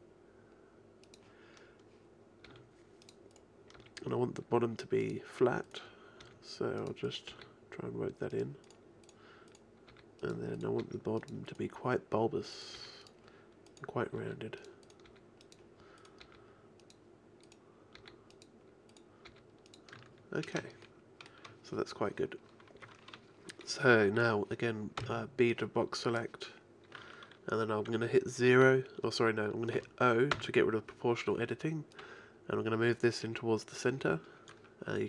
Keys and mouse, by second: 1.4 click, 2.5 g, 3.8 g, 6.2 g, 7.3 g, 9.9 g, 10.8 g, 12.8 g, 14.2 g, 15.1 g, 16.2 g, 18.0 g, 19.3 g, 20.0 a, 20.0 i, 20.6 shift+i, 21.2-22.3 drag, 25.0 b, 30.4 o, 32.0-33.9 drag.